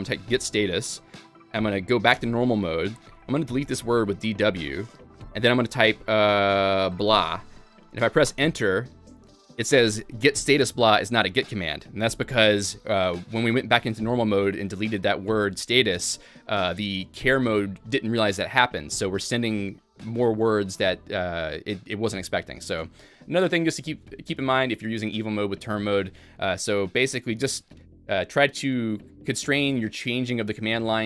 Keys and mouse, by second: 0.4 g, 0.6 g, 2.2 Escape, 2.6-5.2 typing, 7.1 b, 7.3 b, 8.3 b, 13.9-14.6 typing.